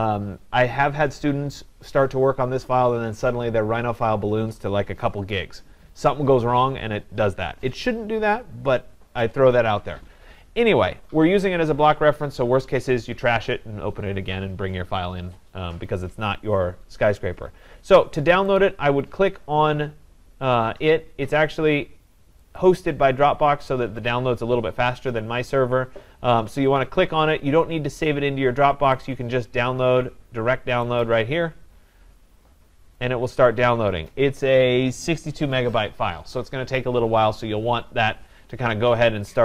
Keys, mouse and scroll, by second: 18.6 click, 22.6 click, 29.0 click, 31.0 click.